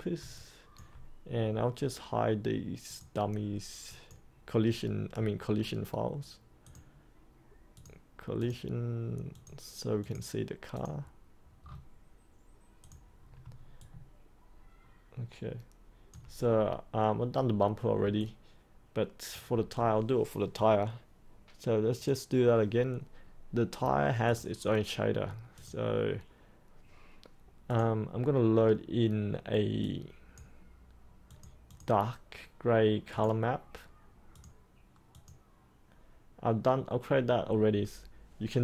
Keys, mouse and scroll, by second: 0.3 alt+click, 2.8 click, 5.4-6.6 scroll down 1, 6.6 click, 11.6-12.8 scroll down 1, 12.8 click, 13.8-16.1 alt+drag, 18.2 alt+click, 21.9-30.9 drag, 33.1 right click, 34.3-38.6 drag.